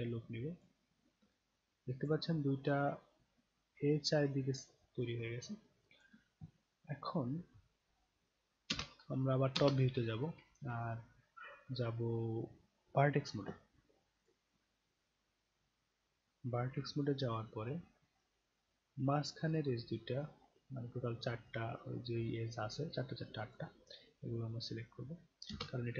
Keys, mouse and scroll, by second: 1.3 alt+click, 2.3-6.0 alt+drag, 8.7 space, 9.6 space, 10.5-13.0 right drag, 14.2 click, 15.5-15.8 scroll down 2, 17.0 alt+middle click, 18.7-23.5 drag, 25.5 space.